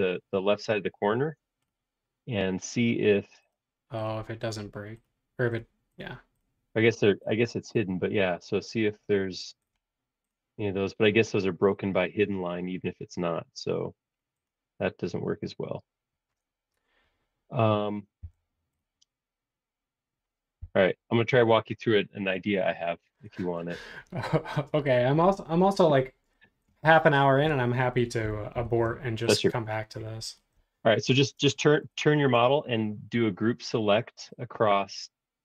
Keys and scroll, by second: 18.2 l, 20.6 Left, 21.1 Right, 22.3 space, 28.5 shift+g, 31.6 Escape, 31.8 typing.